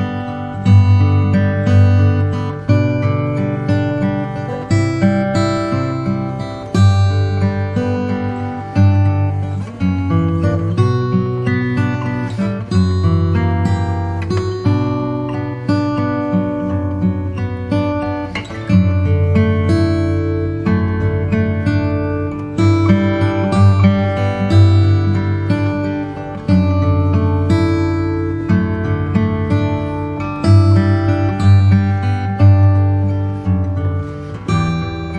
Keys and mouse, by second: 12.0 click, 13.4 s, 16.8-19.7 drag, 25.3-26.4 drag, 30.1 g.